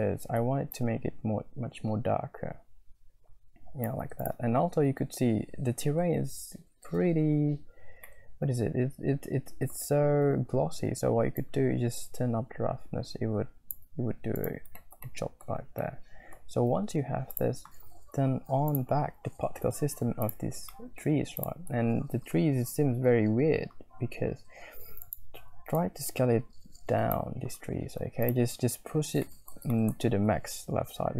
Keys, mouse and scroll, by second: 0.7-3.9 shift+middle drag, 4.2 middle click, 8.2-9.7 shift+middle drag, 11.3-12.7 scroll up 1, 12.7-13.7 shift+middle drag, 14.4 click, 14.5 middle click, 14.8 shift+click, 15.0 middle click, 15.1 click, 15.8 middle click, 15.9 click, 16.0 middle click, 20.7 shift+middle click, 21.0-21.5 scroll up 2, 25.0-25.7 scroll up 1, 25.7-27.3 drag, 28.2 middle click, 29.3 middle click, 29.4 click, 29.5 middle click, 29.7 shift+middle click, 29.7 shift+click.